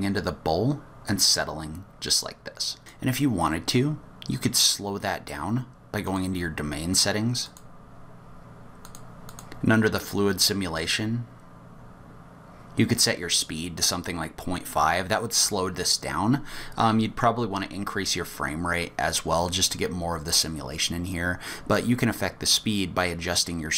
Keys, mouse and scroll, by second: 6.1 click, 6.9 click, 7.4 click, 8.8 click, 9.3 click, 11.2-12.3 scroll down 5.